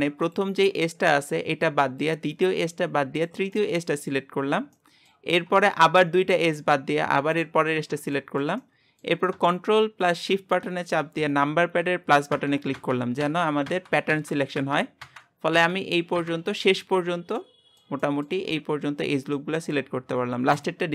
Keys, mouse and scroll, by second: 0.3 click, 2.1 click, 3.6 middle click, 4.2-4.7 scroll up 2, 4.7-7.3 shift+middle drag, 7.3 shift+click, 7.8-8.2 scroll down 1, 8.2-12.3 shift+middle drag, 12.3 ctrl+KP_Add, 12.7 ctrl+KP_Add, 13.7 ctrl+KP_Add, 15.0 KP_Add, 15.5 KP_Add, 17.4-18.4 middle drag, 18.4-19.3 scroll up 2, 19.3-20.6 scroll up 1, 20.6 shift+click.